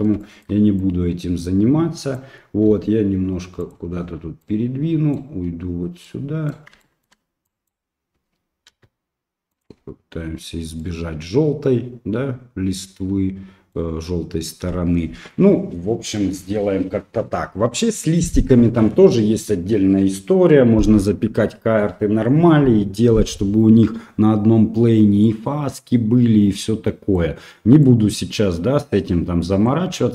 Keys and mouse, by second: 0.4 shift+middle click, 0.8-2.1 drag, 2.7 g, 4.4 right click, 6.1 right click, 6.9 shift+middle click, 7.6 click, 8.7 g, 10.9-13.7 middle drag, 15.8 middle click, 25.3-27.2 middle drag, 27.9-29.7 middle drag.